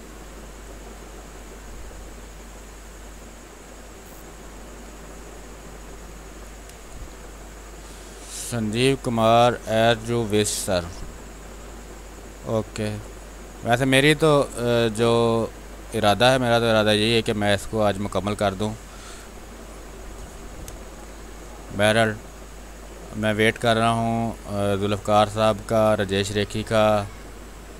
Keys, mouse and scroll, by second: 2.0 space, 2.2 click, 2.5 space, 4.0 click, 4.1 space, 5.1 r, 5.4 click, 6.2 b, 6.6 space, 6.8 click, 7.1 space, 7.7-10.1 drag, 10.1 space, 11.1-14.7 drag, 14.7-17.6 drag, 17.6 space, 18.0 alt+click, 18.6 click, 19.4 r, 19.7 click, 20.3 b, 20.6 space, 20.9 ctrl+click, 21.3-27.7 drag.